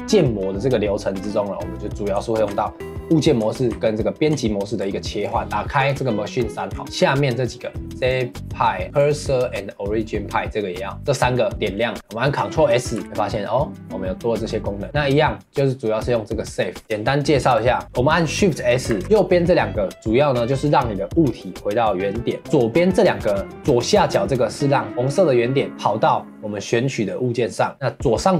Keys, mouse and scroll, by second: 4.8 scroll down 1, 5.0 middle click, 5.3 scroll up 1, 5.4-6.8 drag, 11.9-12.3 scroll up 4, 12.3-13.0 scroll down 1, 13.0 ctrl+s, 16.8 shift+s, 18.9 shift+s.